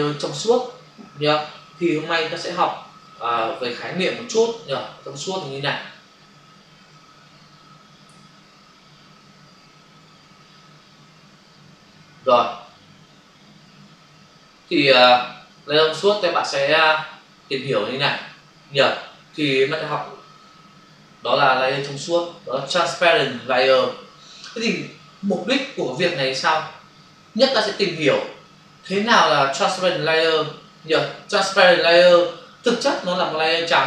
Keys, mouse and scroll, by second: 1.9 alt+Tab, 3.2 alt+Tab, 4.5 click, 5.3 click, 5.5 double click, 6.7 scroll down 1, 18.3-19.6 scroll up 1, 27.3 scroll down 1.